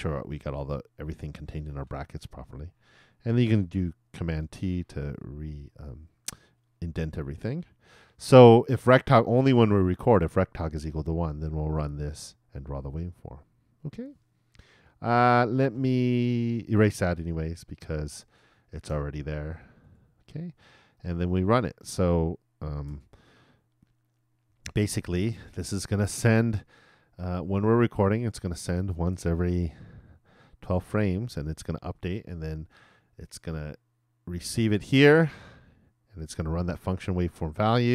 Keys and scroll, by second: 2.2 shift+Return, 3.3 shift+], 4.5 shift+super+t.